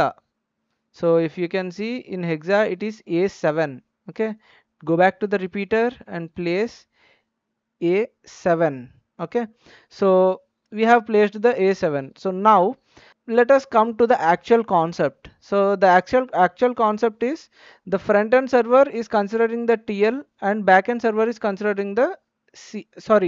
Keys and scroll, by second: 7.8-8.3 typing.